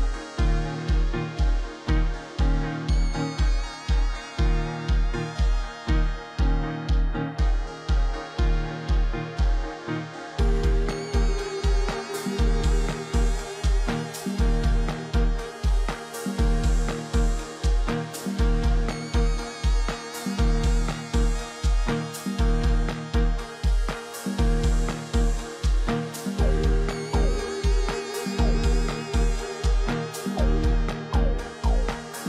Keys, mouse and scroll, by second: 23.9 ctrl+j, 24.9 ctrl+t, 27.1 alt+click.